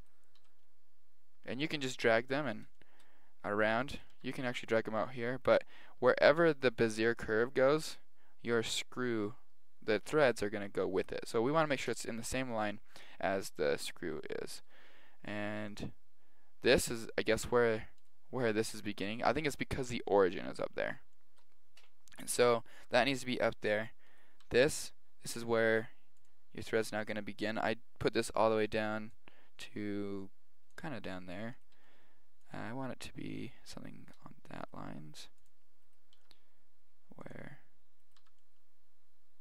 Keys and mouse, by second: 0.0 right click, 0.4 g, 2.2 middle click, 3.9 right click, 4.1 g, 13.9-15.3 middle drag, 15.3 right click, 15.6 g, 19.3-23.1 middle drag, 24.1 right click, 24.4 g, 27.0 right click, 29.1 click, 31.5 right click, 31.7 g, 34.0-36.0 middle drag, 34.6-37.8 right drag, 34.8 g, 36.2 g, 38.0 right click, 38.2 g.